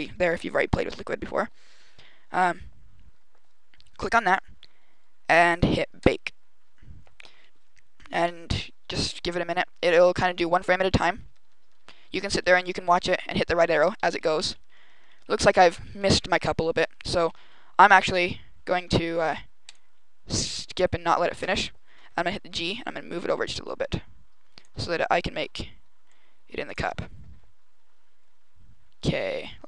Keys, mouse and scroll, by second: 5.9 click, 7.3-9.9 Left, 10.0 Right, 10.2 Right, 10.3 Right, 10.4 Right, 10.6 Right, 10.7 Right, 10.9 Right, 11.1 Right, 11.3 Right, 11.5 Right, 11.7 Right, 11.8 Right, 12.0 Right, 12.1 Right, 12.3 Right, 12.5 Right, 12.6 Right, 13.0 Left, 13.1 Left, 13.3 Right, 13.5 Right, 13.7 Right, 13.9 Right, 14.0 Left, 14.2 Left, 14.4 Left, 14.6 Left, 14.7 Left, 14.8 Left, 15.0 Left, 15.1 Left, 15.2 Left, 15.4 Left, 15.6 Left, 15.8 Left, 16.0 Left, 16.2 Left, 16.4 Left, 16.7 Right, 17.1 Left, 19.5 click, 20.7 right click, 22.3 g, 24.5 click, 25.3 g, 26.6 click.